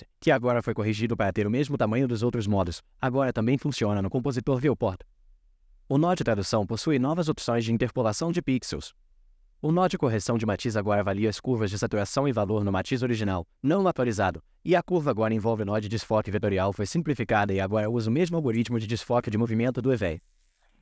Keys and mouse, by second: 2.5-5.5 drag, 6.1 click, 7.5-8.4 drag, 9.5 click, 12.7-13.9 drag, 14.6-15.8 drag.